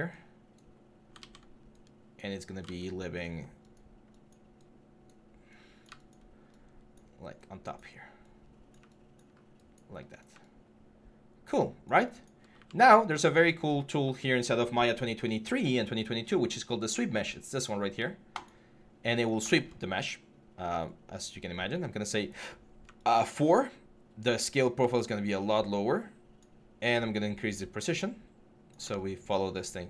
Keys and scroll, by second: 1.0 ctrl+z, 2.4 ctrl+z, 13.2 alt+q.